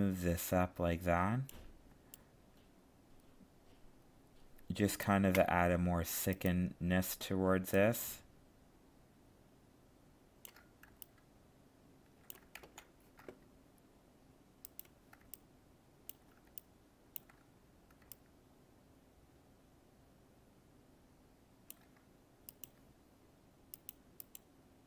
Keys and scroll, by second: 12.6 ctrl+z.